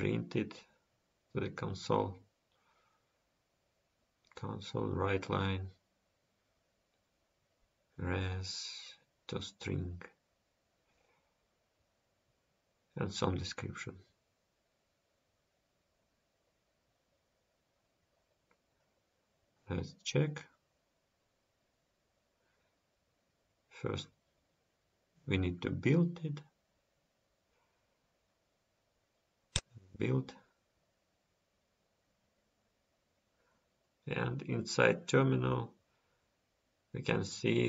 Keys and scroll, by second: 20.4 End, 21.8 ctrl+s.